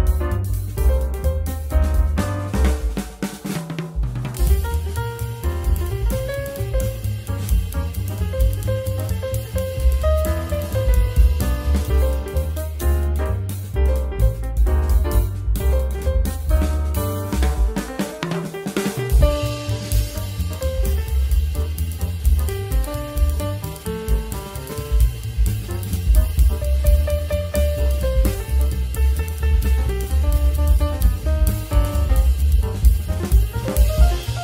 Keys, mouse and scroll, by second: 1.0 Tab, 1.4 click, 2.3 click, 3.0 ctrl+scroll down 2, 10.9 click, 11.8 ctrl+scroll down 1, 16.9 click, 17.4 shift+scroll down 2, 21.8 click, 22.5 shift+scroll up 1, 27.3 click, 28.1 ctrl+scroll down 1.